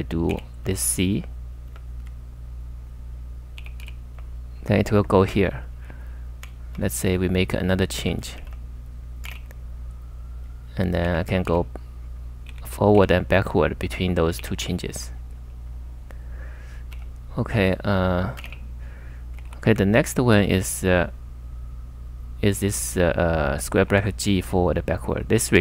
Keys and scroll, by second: 0.3 c, 1.7 j, 3.4-4.3 typing, 5.8-9.3 typing, 10.4-15.5 typing, 16.9 u, 18.2-18.9 typing, 19.5 super+Tab, 23.8 super+Tab.